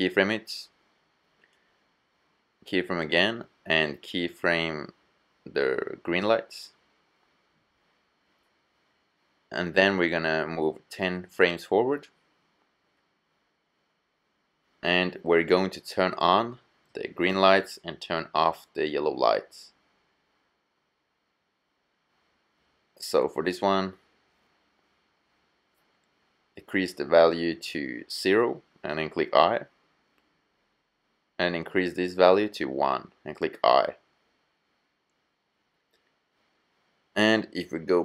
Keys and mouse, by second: 2.0-7.5 drag, 4.4 i, 9.1-10.8 drag, 11.2 KP_0, 25.1-28.7 drag, 28.7 i, 30.0-32.8 middle drag, 34.4 i, 37.5-38.0 middle drag.